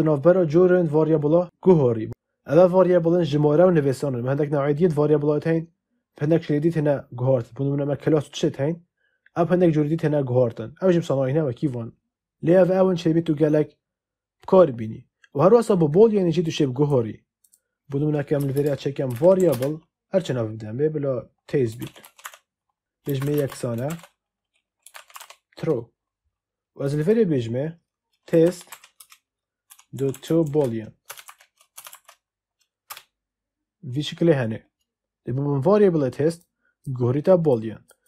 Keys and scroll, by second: 18.3 Return, 18.6 Up, 19.0 v, 19.3 r, 19.4 space, 21.4-26.2 typing, 28.0-31.8 typing, 32.8 Return.